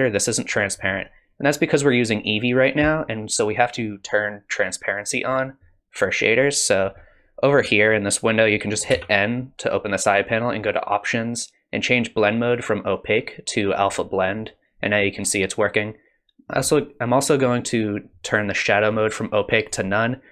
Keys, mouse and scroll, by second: 8.9 n, 10.8 click, 12.4 click, 18.9 click.